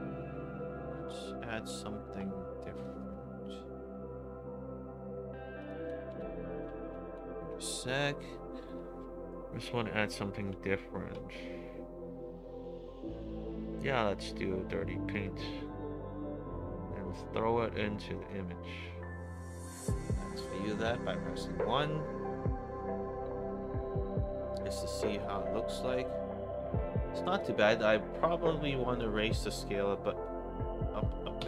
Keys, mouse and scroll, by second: 1.0 click, 2.7 click, 5.5 click, 6.1 BackSpace, 7.2 BackSpace, 8.9 middle click, 8.9-9.4 scroll down 2, 9.8 middle click, 9.8-10.5 scroll down 4, 10.3 middle click, 11.3 middle click, 11.3-11.6 scroll down 2, 15.0-17.1 drag, 20.2 drag, 20.8 1, 27.1 click, 27.2 click, 28.9 click.